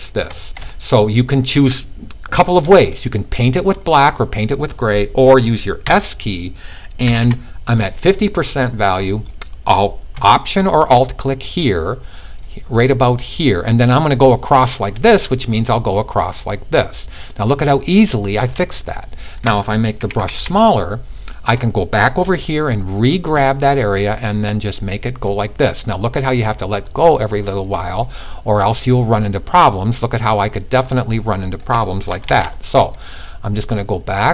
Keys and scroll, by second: 5.3 s, 6.5 typing, 19.5-19.9 typing, 31.8 super+z.